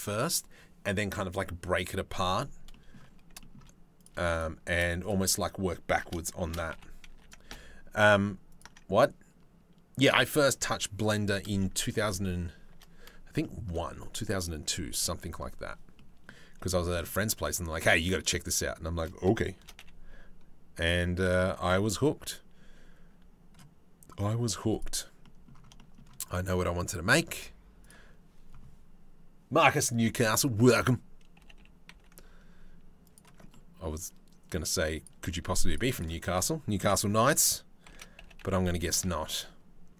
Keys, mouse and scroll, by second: 2.3 middle click, 3.0 shift+middle click, 3.6 middle click, 6.1 shift+d, 11.6 middle click, 13.0 shift+middle click, 15.6 middle click, 16.4 shift+middle click, 17.0 click, 17.7 shift+click, 19.2 shift+d, 21.1 shift+middle click, 24.4 middle click, 24.9 middle click, 25.4 shift+middle click, 27.5 click, 31.0 g, 33.1 click, 35.4 shift+middle click, 35.6 shift+middle click, 36.5 KP_7, 37.5 shift+d.